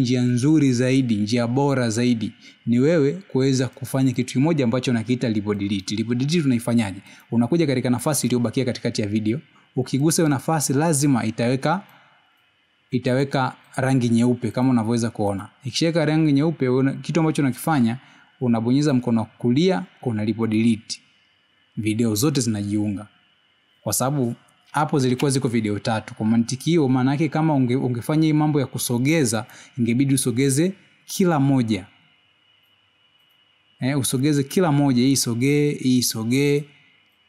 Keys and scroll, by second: 28.1 ctrl+z.